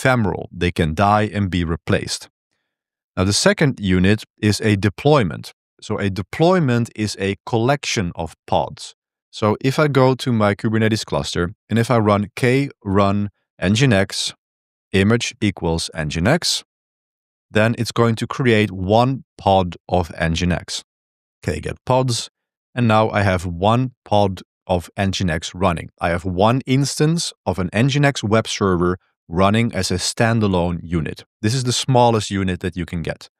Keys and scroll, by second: 2.6 j, 2.8 j, 3.0 j, 4.4 k, 9.9 ctrl+b, 10.1 2, 12.0-16.7 typing, 16.9 Return, 20.8-22.1 typing.